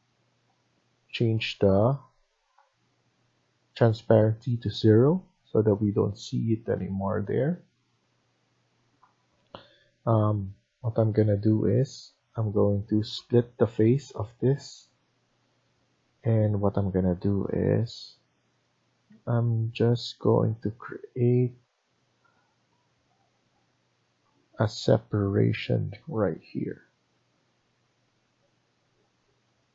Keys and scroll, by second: 1.6 Escape, 19.1 Escape, 24.7 Escape.